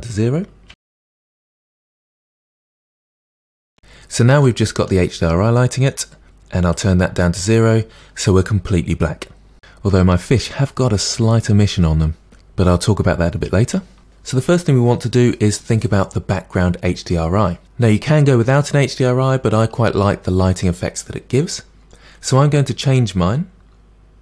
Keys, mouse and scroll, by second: 2.0 click, 3.0-4.4 drag, 4.4-6.3 middle drag, 7.5-9.6 drag, 9.6-12.4 middle drag.